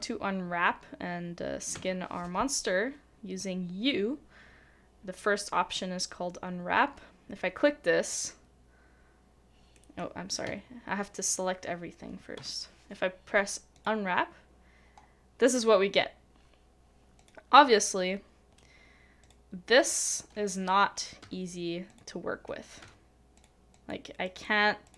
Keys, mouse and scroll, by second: 9.7 u, 9.7 middle click, 23.7 double click.